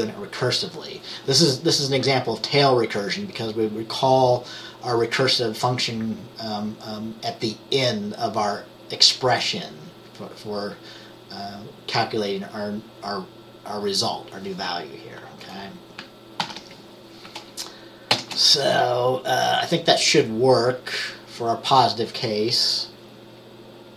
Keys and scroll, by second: 16.5 ctrl+s, 18.2 ctrl+b.